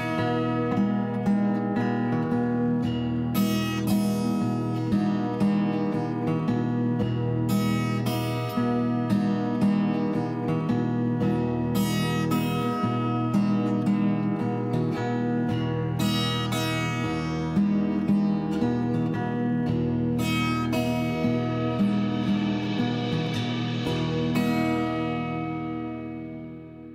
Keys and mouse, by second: 1.1 click, 1.6 click, 2.2 r, 4.7 click, 5.9 click, 6.9 right click, 6.9 r, 7.1 click, 7.9 click, 9.0 g, 12.1 click, 12.4 click, 13.6 g, 17.6 click, 17.9 click, 18.6 click, 19.5 click, 20.0 g, 20.4 y, 21.1 click, 21.7 click, 22.0 g, 22.1 y, 22.8 click, 23.0 click, 24.2 click, 24.6 click, 25.5 click.